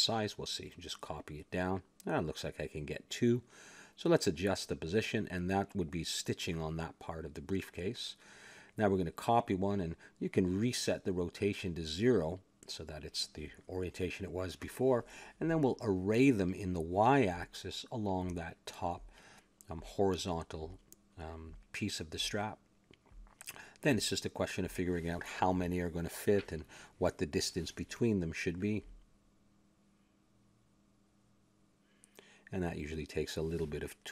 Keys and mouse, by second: 1.0 shift+d, 1.7 click, 4.0-5.9 drag, 5.8-7.6 middle drag, 7.8 shift+d, 8.7-10.4 drag, 10.4 n, 11.3 middle click, 12.0-13.0 drag, 13.2 click, 14.2 n, 15.1 click, 16.3-18.7 middle drag, 18.7-20.0 drag, 20.4 click, 22.1 click, 23.7-25.2 drag, 24.8-26.7 middle drag, 26.7 click, 28.3 middle click, 29.1 click, 29.9 middle click, 30.9-32.3 drag, 32.3-33.3 middle drag, 33.3 click.